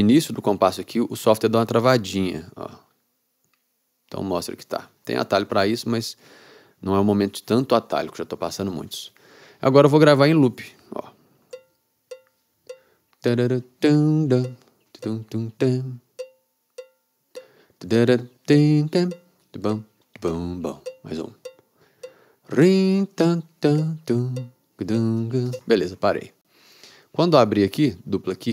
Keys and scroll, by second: 11.6 r, 25.7 space.